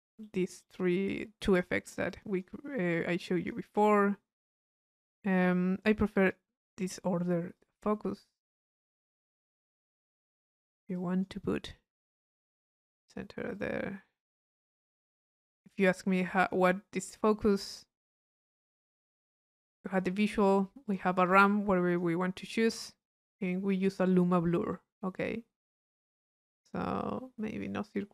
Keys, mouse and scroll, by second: 0.2 right click, 1.1 click, 2.1 click, 2.7 middle click, 3.3-4.4 drag, 7.2 click, 8.6 click, 9.5-11.5 drag, 11.9 click, 12.8 click, 13.6-15.5 drag, 15.6 middle click, 16.0 click, 16.8-18.7 middle drag, 18.7-19.8 drag, 20.8 click, 21.9 click, 23.0-24.0 drag, 24.4-26.1 middle drag, 26.4 click, 27.5 click.